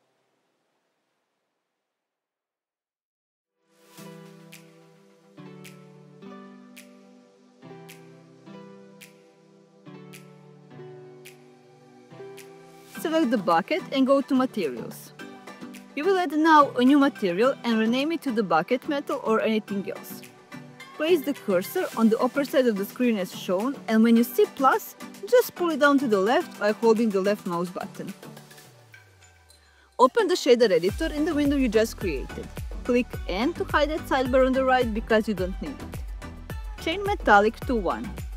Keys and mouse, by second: 0.9 click, 1.0-6.5 drag, 6.6-9.5 drag, 10.8 click, 12.2 click, 16.2 click, 18.7 drag, 19.4-19.8 drag, 20.0 click, 20.2-25.5 drag, 30.1-31.6 drag, 33.4 n, 34.8 middle click, 35.9 click, 37.2-38.3 drag.